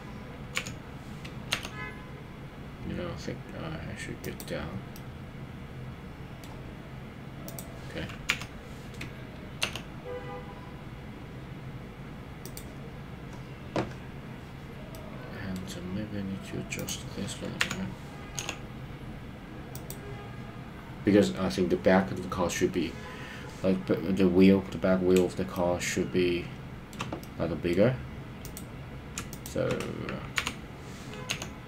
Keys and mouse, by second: 0.6 KP_3, 1.6 g, 4.2 click, 4.9-6.4 middle drag, 8.3 KP_3, 9.7 g, 14.9 middle click, 17.7 KP_3, 18.5 g, 19.9 click, 25.5-26.9 shift+middle drag, 27.2 middle click, 30.4 KP_3, 31.4 g.